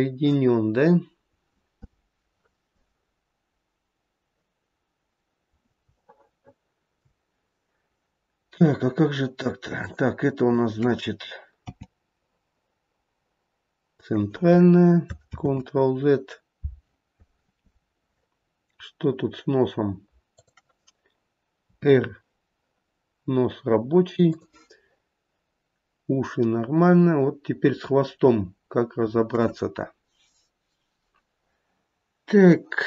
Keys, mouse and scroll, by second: 0.6-3.6 scroll down 1, 4.9-5.8 scroll up 1, 6.0 shift+middle click, 6.5 shift+middle click, 11.7 g, 15.4 ctrl+z, 19.1-20.4 scroll down 1, 20.4 click, 21.7 r, 27.9-28.9 scroll up 2.